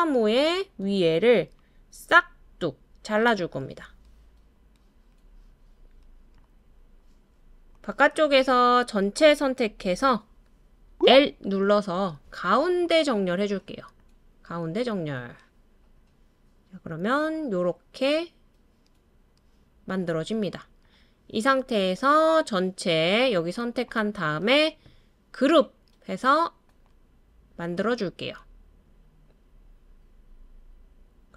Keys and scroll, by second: 10.9 l, 11.2 l.